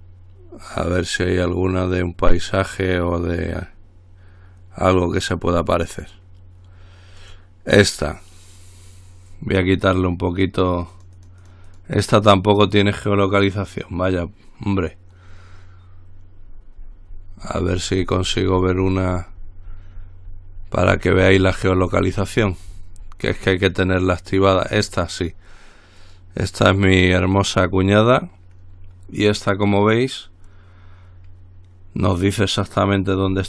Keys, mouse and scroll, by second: 7.4 click, 10.9-12.5 drag, 16.3-24.6 scroll down 3, 24.9-25.5 scroll up 1, 26.2 click.